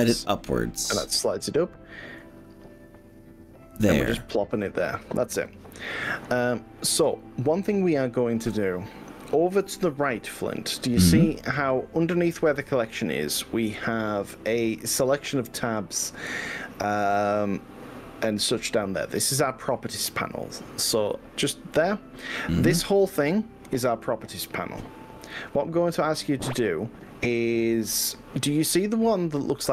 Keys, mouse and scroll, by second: 3.8 click, 5.4 click, 5.8 middle click, 9.3-15.0 middle drag, 16.6 click.